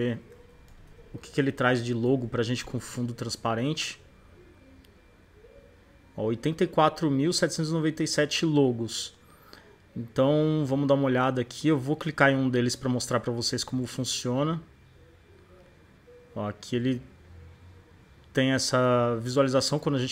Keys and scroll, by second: 0.1-1.4 typing, 2.0 Return.